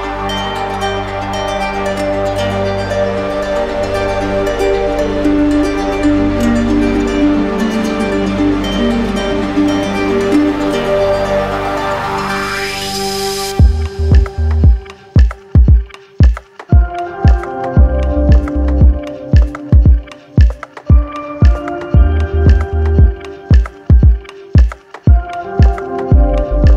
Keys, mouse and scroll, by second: 1.4 click, 2.2 right click, 3.3 click, 4.3 right click, 4.7 right click, 5.0 shift+right click, 7.8 click, 8.7 right click, 9.6 right click, 11.1 right click, 13.5 click, 14.2 right click, 14.6 shift+right click, 15.6 right click, 17.5 click, 19.6 click, 20.4 right click, 22.8 click, 23.1 ctrl+z, 24.2 right click, 24.8 right click, 24.8 d.